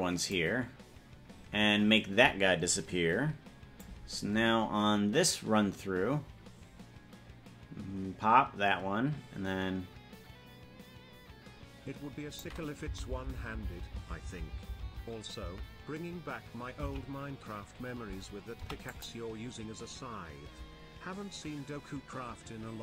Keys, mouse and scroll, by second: 0.5 right click, 3.9-12.6 drag, 13.1 Right, 13.3 Right, 13.7 Right, 13.9 Right, 14.1 Right, 14.5 Right, 14.7 Right, 15.1 Right, 15.7 Right, 17.1 Left, 18.7 i.